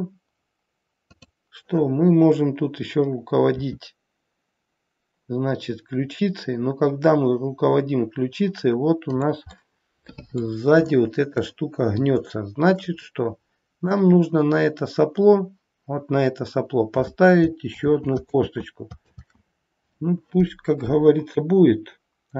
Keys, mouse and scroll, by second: 3.5 r, 9.5 middle click, 10.9 shift+middle click, 13.0 middle click, 13.0-15.3 scroll up 1, 17.7 ctrl+z, 18.2 ctrl+z.